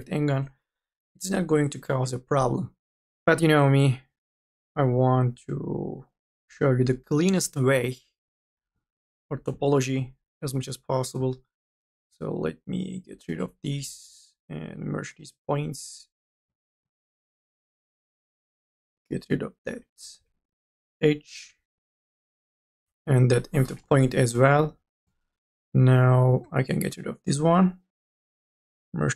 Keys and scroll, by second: 0.6 ctrl+z, 1.2 1, 1.9 m, 2.3 e, 3.1 ctrl+z, 19.9 e, 20.2 1, 23.3 Delete, 24.6 m, 25.0 e.